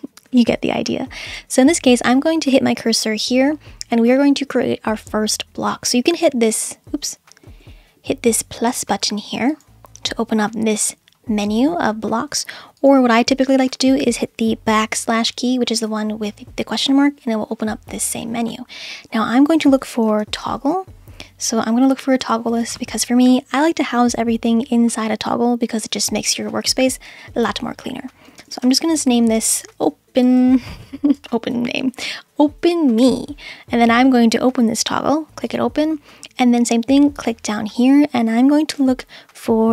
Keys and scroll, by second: 15.8 /, 20.0 t, 20.4 g, 28.1-31.5 typing, 38.7 /.